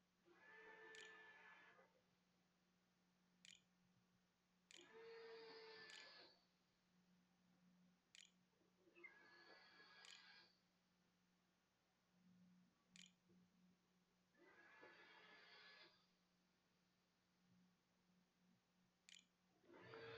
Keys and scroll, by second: 0.7 Tab, 2.1-5.7 typing, 7.9 Tab, 9.8 End, 11.5 Return, 12.2-14.0 typing, 17.9-19.4 typing.